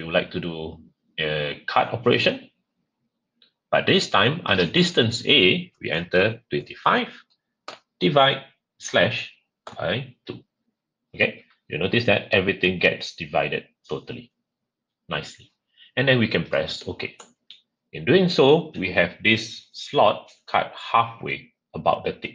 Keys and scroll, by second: 6.5-8.1 typing, 9.3-10.1 typing.